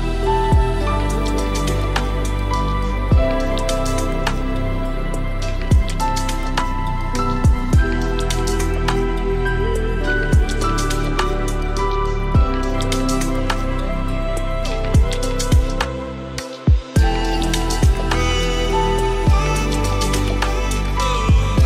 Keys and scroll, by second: 20.6 ctrl+space.